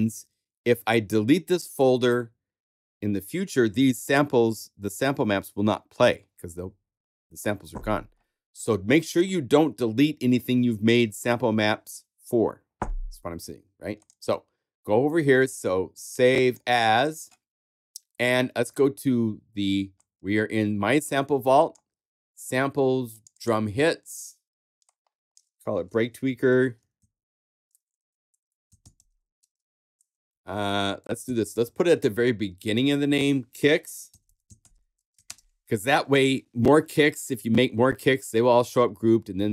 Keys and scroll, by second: 26.0-30.3 typing, 30.8 shift+super+BackSpace, 31.0 super+a, 31.2 super+Left, 33.8-35.1 typing.